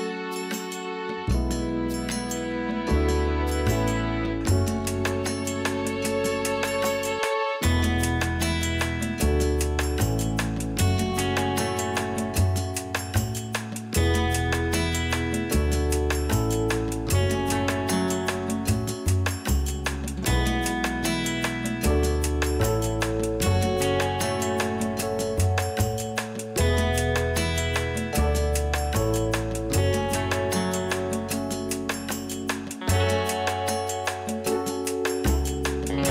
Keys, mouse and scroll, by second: 0.0-0.3 scroll up 1, 0.4 scroll down 1, 0.7-8.2 middle drag, 2.2 KP_1, 3.6-4.0 scroll down 1, 4.1 scroll up 1, 4.6 scroll up 1, 4.7-5.7 scroll down 2, 5.7 scroll down 1, 5.7-6.5 scroll up 2, 6.5-8.2 scroll up 1, 8.2-9.2 alt+drag, 9.3-10.1 drag, 16.6 right click, 20.5 ctrl+z, 21.0-21.4 drag, 21.4-22.4 scroll down 2, 23.0 click, 23.6 g, 25.2 click, 25.8 g, 28.2 click, 28.4 scroll down 1, 28.6-31.8 middle drag, 29.5 KP_3, 30.0-30.5 scroll up 2, 31.1 scroll up 2, 31.4-31.8 scroll down 2, 31.8 click, 32.1-36.0 middle drag, 32.1 scroll down 2, 33.8 ctrl+r, 35.5 click, 36.0 scroll up 1.